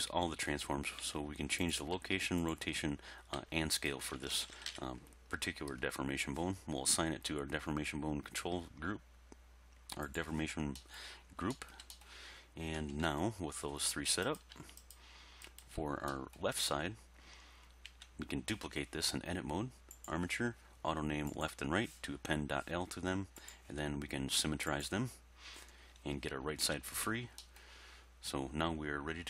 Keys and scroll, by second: 1.0 g, 2.0 r, 3.4 s, 4.4 alt+r, 4.5 alt+g, 4.7 alt+s, 12.8 1, 13.1 3, 17.9 Tab, 26.7 Tab.